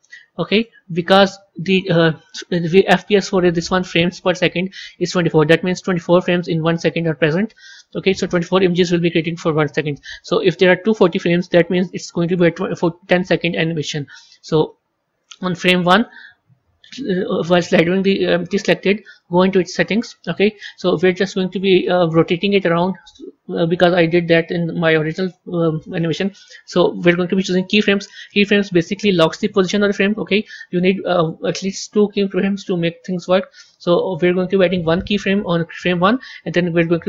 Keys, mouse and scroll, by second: 19.6 click.